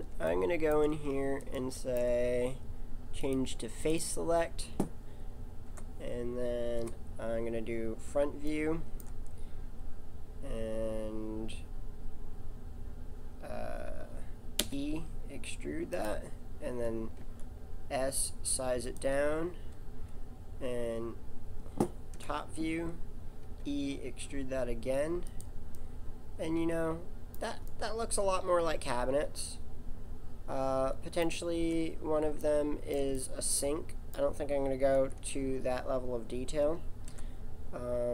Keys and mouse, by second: 3.2 click, 3.9-5.6 middle drag, 5.6 KP_7, 6.8 KP_1, 14.6 e, 16.6 s, 17.2 s, 22.1 KP_7, 23.4 e, 28.4-29.9 middle drag, 32.8-35.0 middle drag, 35.0 Tab, 37.1 KP_7.